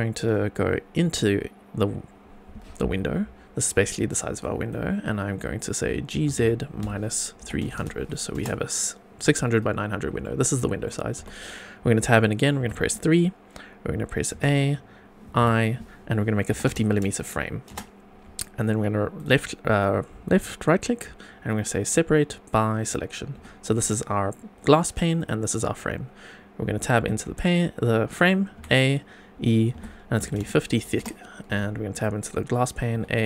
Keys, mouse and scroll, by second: 1.0 Tab, 4.4 click, 6.1 g, 6.3 z, 6.8 KP_Subtract, 7.4 KP_3, 7.6 KP_0, 7.7 KP_0, 8.3 Return, 9.2 Tab, 9.8 scroll up 2, 10.2-10.9 shift+middle drag, 11.2 Tab, 12.6 3, 15.4 a, 15.4 i, 16.5 KP_5, 16.6 KP_0, 17.7 Return, 19.1 right click, 23.3 Tab, 23.8 click, 25.1 click, 26.9 Tab, 28.6 a, 29.7 e, 30.2 KP_5, 30.3 KP_0, 30.9 Return, 31.5 Tab, 31.9 click, 32.9 Tab.